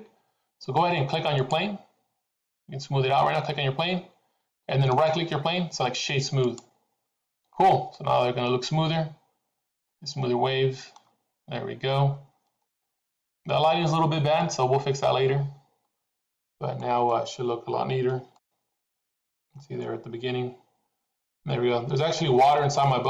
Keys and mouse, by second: 5.1-6.6 right drag, 8.0 middle click, 9.8-11.1 middle drag, 12.6 middle click, 14.4 middle click, 16.8-17.2 middle drag, 18.8 shift+middle click.